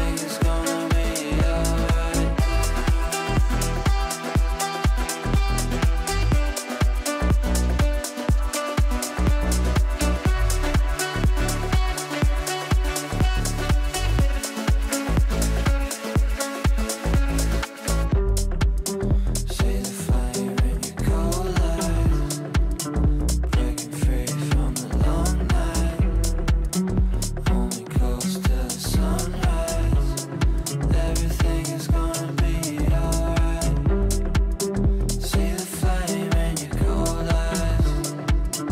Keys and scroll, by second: 37.7 r.